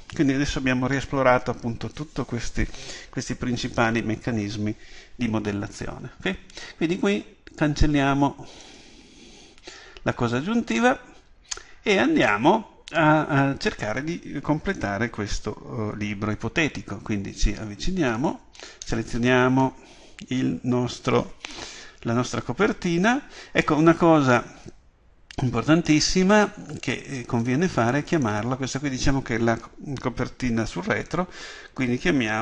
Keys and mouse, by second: 7.8-9.5 drag, 9.5-10.7 middle drag, 10.7-18.2 drag, 18.2 right click, 19.9-24.6 middle drag, 24.6-32.4 drag.